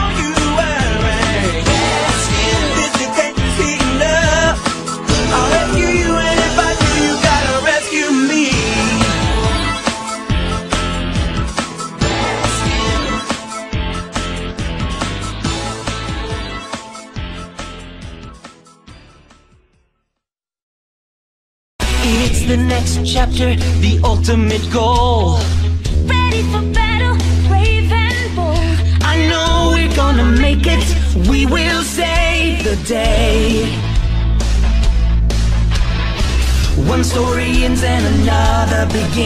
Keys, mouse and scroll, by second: 2.4 click, 2.6-4.1 drag, 5.3 a, 6.2 a, 8.0 a, 11.9-13.7 drag, 15.2-17.3 middle drag, 19.6-21.5 middle drag, 21.5-26.2 right drag, 26.6-28.3 drag, 29.4-31.0 drag, 30.4-32.2 right drag, 31.8-33.4 drag, 34.4 a, 35.1-36.9 middle drag, 37.9-39.2 drag.